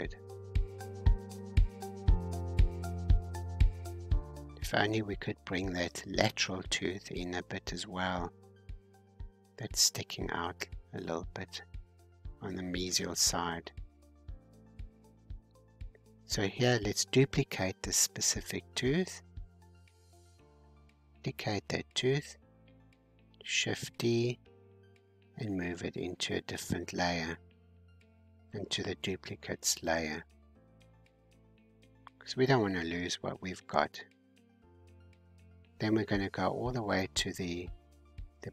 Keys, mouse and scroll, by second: 1.2-2.2 scroll down 4, 2.2-3.6 middle drag, 3.6-4.1 scroll up 4, 4.2-6.4 scroll down 2, 7.4-10.2 drag, 10.2-10.8 scroll down 1, 10.8-12.2 scroll down 6, 12.2-16.2 scroll down 30, 16.2-18.7 drag, 18.7 ctrl+z, 19.9-22.3 drag, 22.8 shift+d, 24.9 m, 30.6-32.0 scroll down 1, 35.0-37.2 scroll down 9.